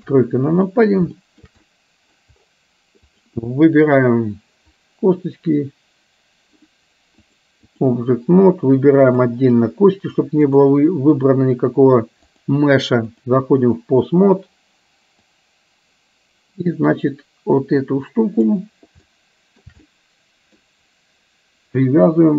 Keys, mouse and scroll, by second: 0.1 KP_3, 1.3 shift+middle drag, 1.6-2.3 middle drag, 7.5 click, 9.0 click, 10.5-11.1 drag, 12.3-13.4 drag, 15.3-18.6 drag, 19.1-19.8 shift+middle drag, 20.0-20.6 middle drag, 21.9-22.3 drag.